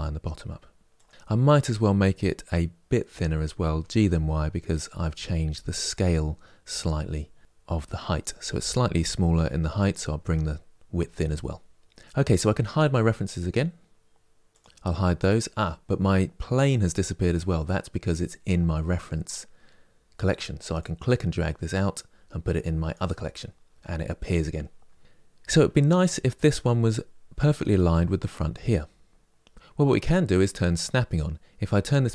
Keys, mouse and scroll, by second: 1.1 middle click, 1.3 click, 3.4 g, 11.0-14.2 middle drag, 14.2 click, 22.6 click.